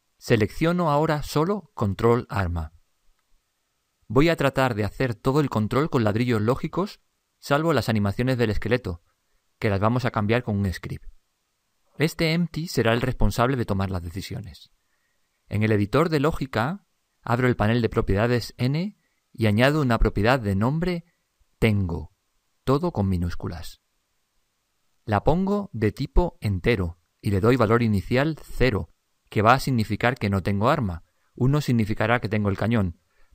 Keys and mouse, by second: 4.5 click, 18.7 n, 19.9-22.9 drag.